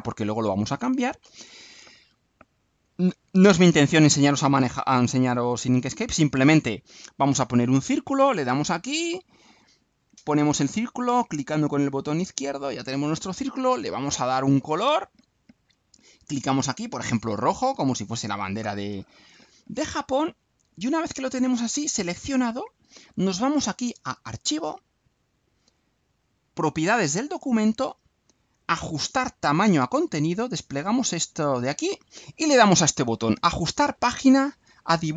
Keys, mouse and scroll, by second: 8.7 click, 10.2-12.7 drag, 14.2 right click, 14.9 click, 17.4 click, 19.6 right click, 20.2 click, 24.6 click, 26.8 click, 31.2 click.